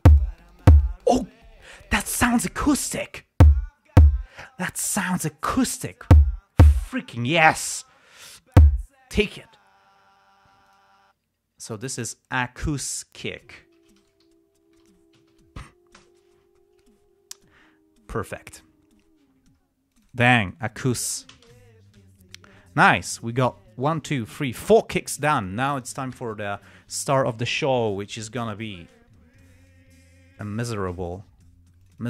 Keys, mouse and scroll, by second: 11.0 click, 12.6 click, 13.8-16.1 typing, 16.3 Return, 19.2 scroll up 2, 20.3 click, 20.8 click, 21.7 s, 21.8 Return, 22.7 scroll up 1, 23.0 scroll down 1, 23.6-23.9 scroll up 1, 30.0 click, 30.7 click, 31.2 click.